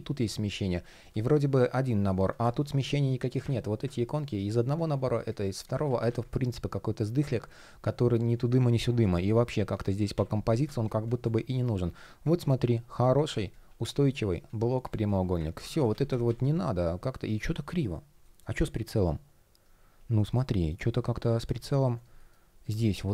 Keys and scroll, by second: 3.7 shift+p, 5.5 super+z, 8.2 super+z, 11.2 shift+p, 15.2 super+z, 16.9 shift+o, 17.8 shift+g, 19.8 shift+o, 21.8 shift+p.